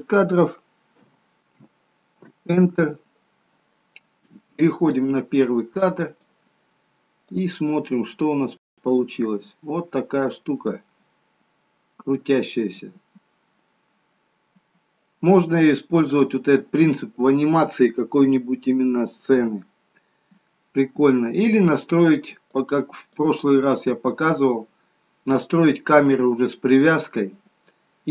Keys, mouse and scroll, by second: 4.7 click, 16.0 click, 22.4 click.